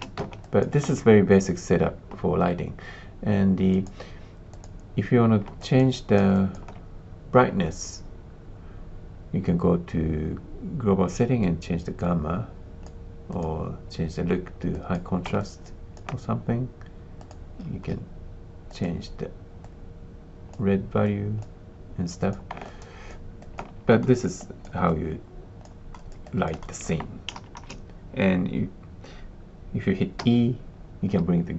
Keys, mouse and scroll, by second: 0.4 alt+click, 3.8 click, 4.5 click, 5.5 alt+click, 6.3 alt+click, 11.4-12.8 drag, 13.4-15.0 drag, 15.4 alt+click, 17.2 click, 19.6 click, 21.2 click, 22.2 click, 22.6 alt+click, 23.4 alt+click, 24.0 alt+middle click, 24.4 alt+click, 24.8 alt+click, 25.9 alt+middle click, 26.2 alt+click, 26.6 alt+middle click, 27.3 shift+z, 27.5 shift+z, 30.1 e.